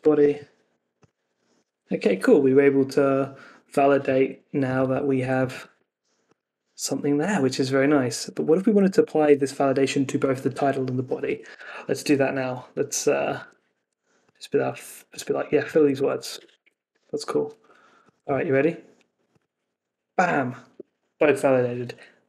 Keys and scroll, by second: 5.7 super+v, 11.5 super+Tab, 13.3 Escape, 15.1 super+c, 16.0 super+v, 16.3 Escape, 16.5 super+s.